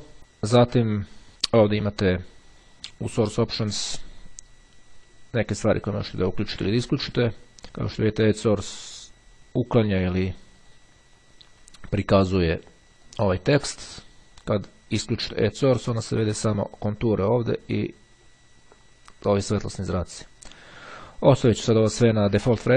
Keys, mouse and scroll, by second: 6.8 click, 10.6 click, 13.1 click, 14.2-15.8 drag, 20.5 click.